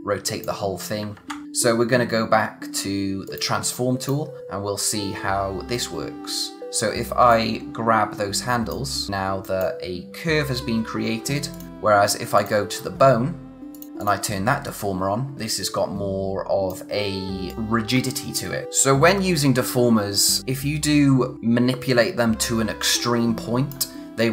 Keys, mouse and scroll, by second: 1.1 ctrl+z, 3.2 click, 4.7-5.3 scroll up 1, 5.3 scroll down 1, 7.3 click, 18.7 scroll down 1, 19.1-20.4 scroll up 1, 20.4 click.